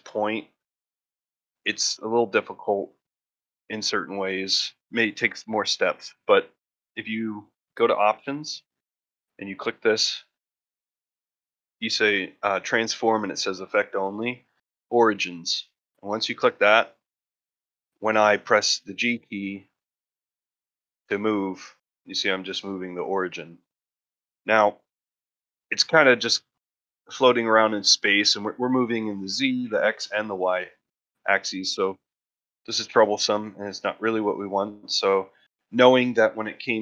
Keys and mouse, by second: 3.8 middle click, 4.2 shift+middle click, 4.5 ctrl+middle drag, 4.8 shift+middle drag, 5.2 ctrl+middle click, 9.2-16.1 drag, 16.7-17.1 middle drag, 17.4 shift+middle drag, 17.9 ctrl+middle click, 18.2 shift+middle drag.